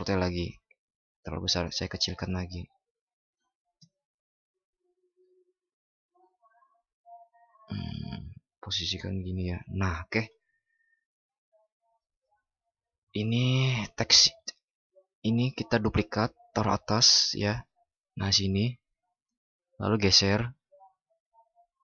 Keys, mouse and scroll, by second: 12.9 ctrl+?, 15.7 ctrl+shift+i.